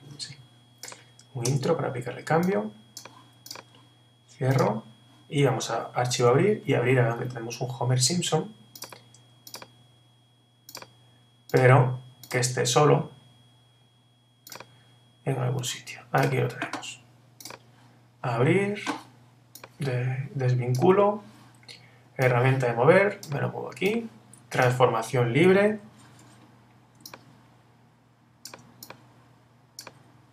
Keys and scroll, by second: 1.5 Return, 6.1 super+o, 25.7 super+t.